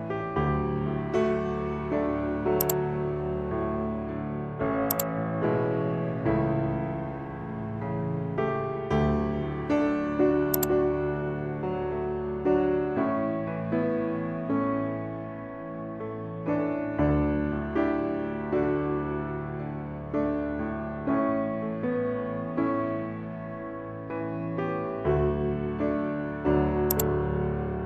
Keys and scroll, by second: 2.6 ctrl+alt+shift+e, 8.8 ctrl+j.